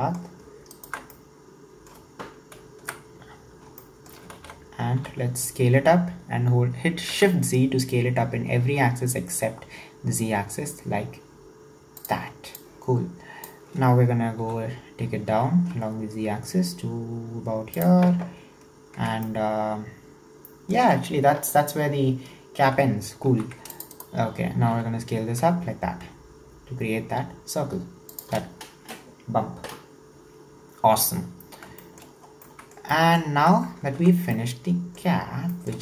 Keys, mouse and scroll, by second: 0.7 alt+shift+right click, 1.1-2.8 middle drag, 2.8 KP_1, 3.4-3.8 scroll up 2, 3.8-4.4 shift+middle drag, 4.4 alt+z, 5.0 s, 12.6 click, 14.4 e, 19.3-22.3 shift+middle drag, 23.3 ctrl+r, 24.6 s, 31.3-31.8 scroll down 6, 31.8 shift+middle click, 32.3 scroll down 1, 32.4 middle click, 33.4 Tab, 33.9 alt+z, 34.4-35.2 middle drag, 35.2-35.6 scroll up 3, 35.6 shift+middle click.